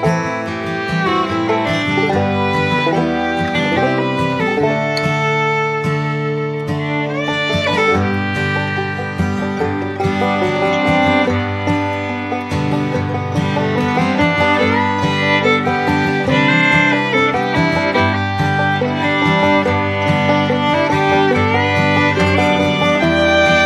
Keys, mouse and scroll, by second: 4.3 right click.